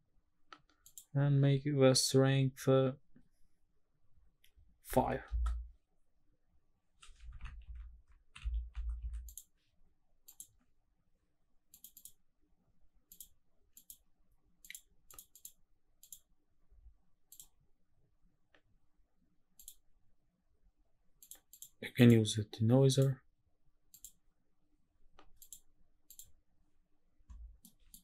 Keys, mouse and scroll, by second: 0.9-5.3 drag, 10.3 click, 11.7 click, 12.0 click, 13.1 click, 13.8 click, 14.6 click, 15.1 click, 15.3 click, 16.0 click, 17.3 click, 19.6 click, 21.2 click, 21.5 click, 22.0 click, 22.9-24.2 drag, 25.4-26.3 drag, 27.6 middle click.